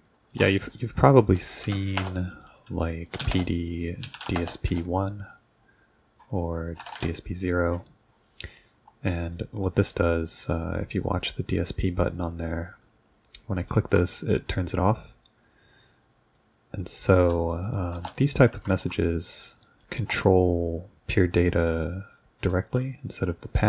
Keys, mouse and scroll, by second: 0.3 ctrl+2, 0.5 click, 1.6 ;, 2.0 Return, 2.9-5.2 typing, 6.8 BackSpace, 7.0 0, 8.4 click, 9.4 drag, 13.6 ctrl+click, 16.4-17.0 drag, 17.2 click, 17.7 click, 17.9 BackSpace, 18.0 1, 18.2 click, 18.6 ctrl+click, 19.3-19.9 drag, 20.0 BackSpace, 22.4 click, 22.7 ctrl+s.